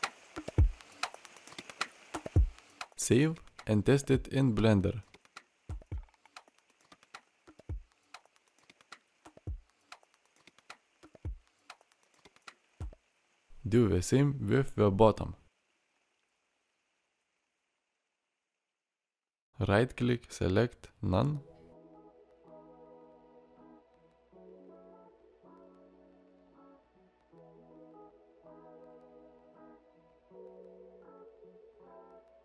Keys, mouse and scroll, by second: 8.0 alt+r, 9.3-9.8 drag, 9.8-10.6 middle drag, 11.3 shift+drag, 11.6-13.0 middle drag, 13.4 middle drag.